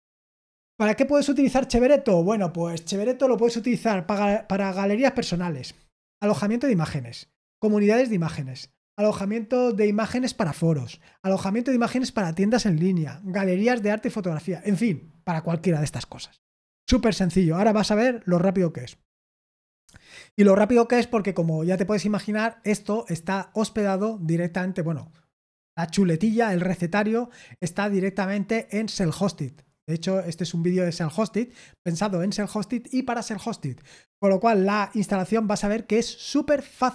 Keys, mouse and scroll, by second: 0.5-2.0 scroll down 3.